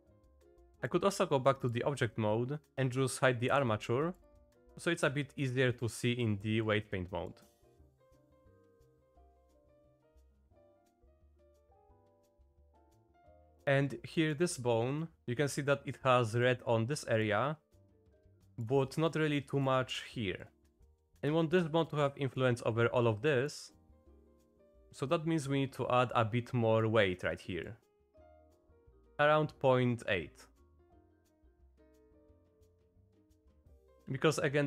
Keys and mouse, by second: 0.3 click, 0.7 h, 0.7 click, 3.5 h, 4.2 click, 4.7 click, 5.6 click, 6.2 click, 6.6 click, 8.1 click, 9.2 click, 9.9 shift+click, 10.1 click, 10.6 click, 11.5 click, 11.9 click, 12.4 click, 12.8 shift+click, 13.2 click, 14.2 click, 16.5 click, 18.3 click, 18.5 shift+click, 18.8 click, 19.4 click, 20.5 middle click, 20.9 shift+middle click, 22.0 middle click, 23.3 middle click, 24.5-26.2 drag, 26.8 click, 28.1 click, 28.5-29.7 drag, 30.1 click, 31.5 click, 32.1 click, 33.2 click, 33.9-34.6 drag.